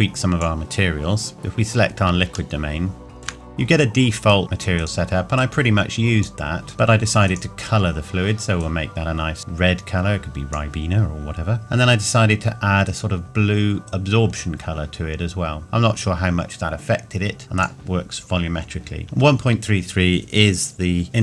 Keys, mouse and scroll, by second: 2.6 shift+middle click, 4.3 click, 6.7 shift+middle click.